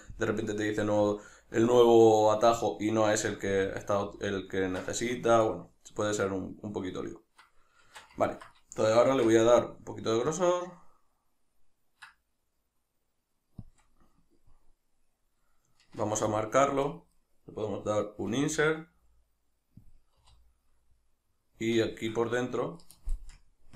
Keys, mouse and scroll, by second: 3.5 a, 7.9 shift+Tab, 9.1 alt+e, 13.8 shift+click, 13.9-17.0 middle drag, 16.0 ctrl+r, 17.0 right click, 17.2-20.0 middle drag, 20.0 click, 20.2 3, 20.7-23.7 middle drag, 23.4 ctrl+KP_Add.